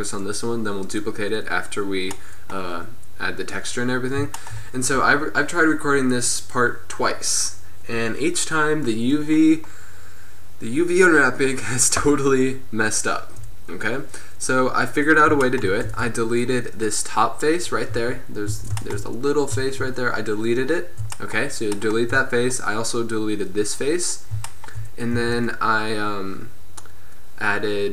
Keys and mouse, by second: 2.0 middle drag, 7.3-16.0 drag, 11.4-16.0 right drag, 16.0 Tab, 18.0 z, 18.6 a, 25.3 a.